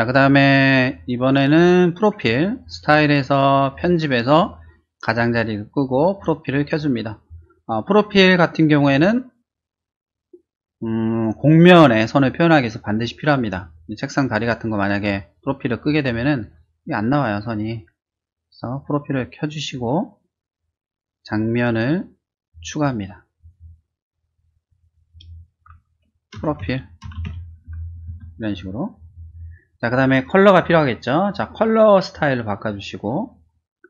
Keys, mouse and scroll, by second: 2.6 click, 3.7 click, 5.1 click, 6.1 click, 15.4 click, 16.0 click, 18.6 click, 19.0 click, 22.5 click, 23.4 click, 24.6 click, 26.4-27.2 typing, 28.1 Return, 32.1 click.